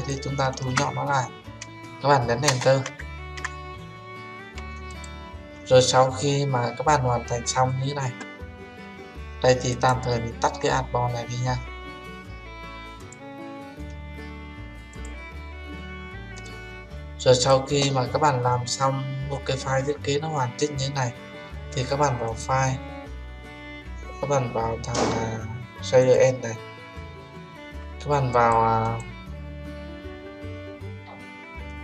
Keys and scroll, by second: 2.4 Return.